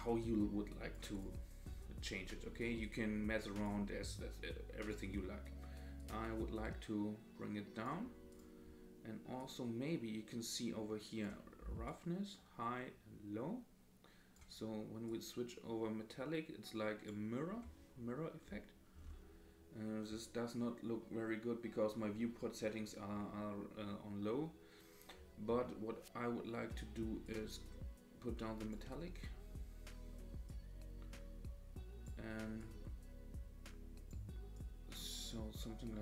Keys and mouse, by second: 0.2 click, 1.1 click, 2.8 click, 4.8 click, 8.3 click, 9.4-11.2 drag, 11.9-14.4 drag, 15.1-17.1 drag, 27.2-28.7 drag, 30.5-32.1 drag, 32.6-34.1 drag, 34.5-36.0 drag.